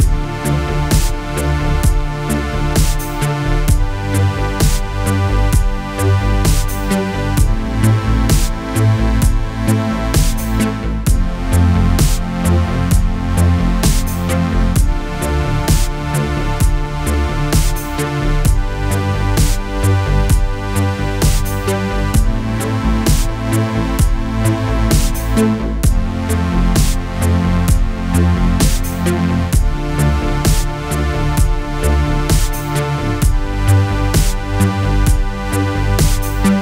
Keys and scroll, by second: 14.4 space, 15.1 alt+space, 15.6 alt+space, 16.6 space, 19.8 alt+space, 20.6 alt+space, 24.6 alt+space, 25.5 alt+space, 26.4 alt+space, 29.6 alt+shift+space, 34.1 ctrl+z.